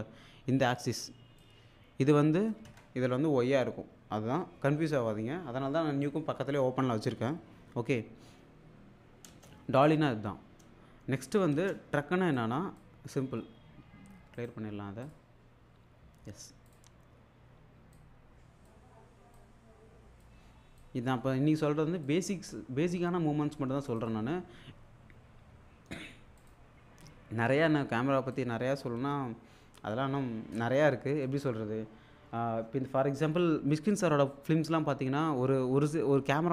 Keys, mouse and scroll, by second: 1.4-2.6 click, 2.7 alt+Tab, 9.3 space, 11.5 space, 12.3-12.9 click, 13.4-13.7 scroll down 1, 15.0 click, 16.7 click, 18.0-18.9 drag, 24.0 click, 26.4 click, 28.3-31.5 drag.